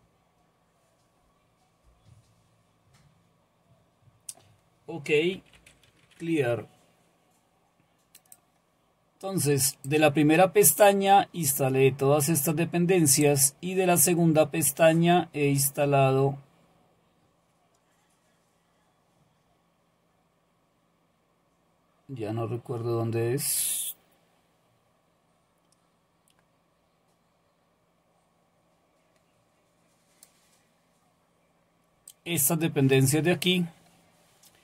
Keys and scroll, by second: 5.1-6.5 typing.